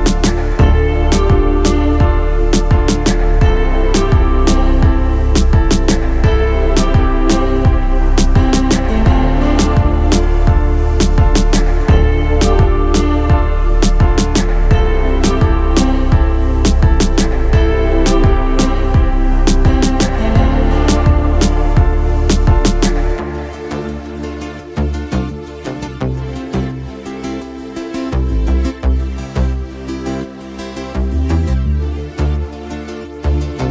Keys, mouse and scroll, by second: 1.6-20.7 drag, 20.8-21.5 middle drag, 22.1-24.4 drag, 24.4-24.9 middle drag, 24.9-25.5 drag, 25.5 middle click, 26.0 middle click, 26.9-27.3 middle drag, 27.6-30.0 middle drag, 30.4-31.6 middle drag, 32.3-32.9 middle drag, 32.9-33.7 drag.